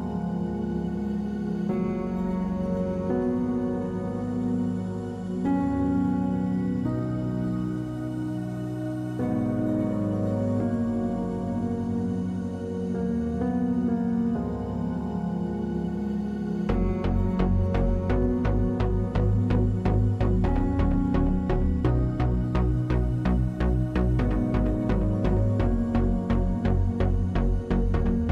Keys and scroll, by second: 16.5-17.2 typing, 18.6 2, 22.2 3, 23.2 2, 23.5 Return.